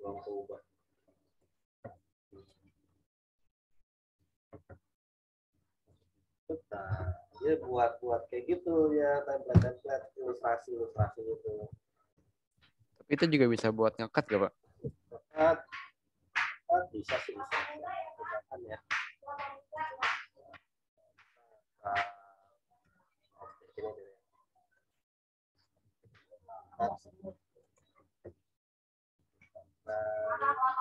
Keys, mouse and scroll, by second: 10.9 click, 11.2 ctrl+z, 17.4 click, 19.7 click, 22.8 v, 23.5 right click, 24.0 click, 26.0 ctrl+z, 27.6 click.